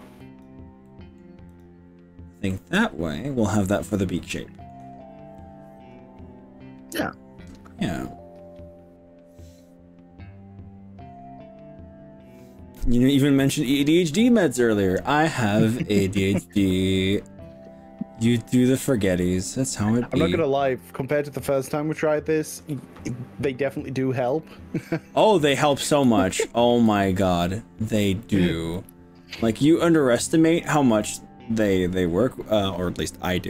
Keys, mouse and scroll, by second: 0.3 click, 0.9 middle click, 1.5 click, 2.5-3.5 middle drag, 3.7-4.7 middle drag, 7.0-10.1 middle drag, 10.1 click, 11.2-13.5 middle drag, 13.5-14.6 drag, 15.5 scroll down 1, 17.1-19.3 middle drag, 17.3-18.3 scroll down 1, 20.2-21.5 middle drag, 22.0 middle click, 23.0 shift+middle click, 24.0 middle click, 24.7-25.1 scroll down 4, 25.3 middle click, 26.2-27.5 shift+middle drag, 27.7 scroll up 3, 28.2 middle click, 29.1-32.5 middle drag, 32.5 click.